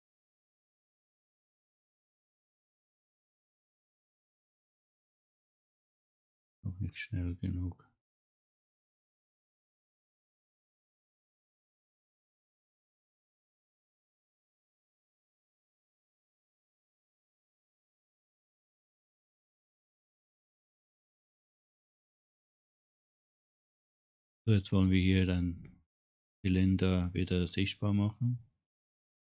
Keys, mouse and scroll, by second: 4.2 click, 5.2 click, 7.5-9.7 drag, 10.1 right click, 10.7 right click, 12.4 click, 14.2 click, 20.0 click.